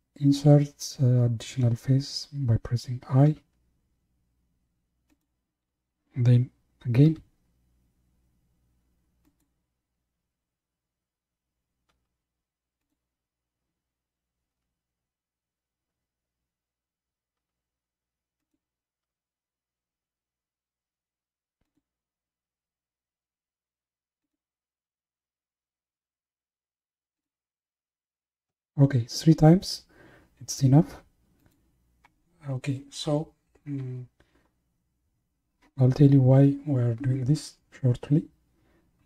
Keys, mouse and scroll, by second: 3.5 i, 7.1 i, 11.9 i, 14.5 i, 19.1 i, 22.5 i, 24.9 i, 27.8 i.